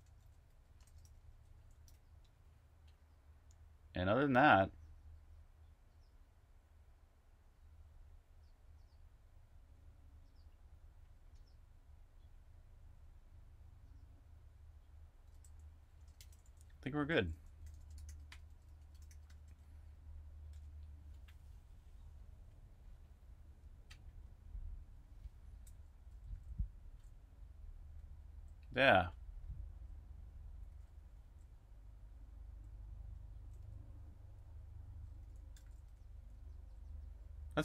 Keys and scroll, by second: 0.0-2.0 typing, 4.1 typing, 15.3-19.1 typing, 20.1-21.5 typing, 25.5-28.8 typing, 29.9-37.6 typing.